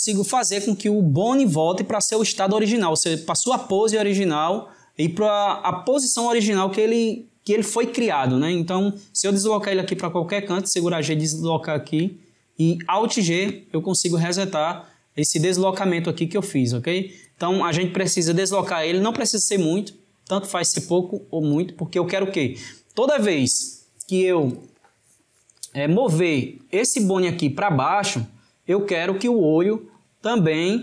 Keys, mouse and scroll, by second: 13.0 alt+g, 18.3 click, 24.5-29.7 drag, 30.0-30.8 drag.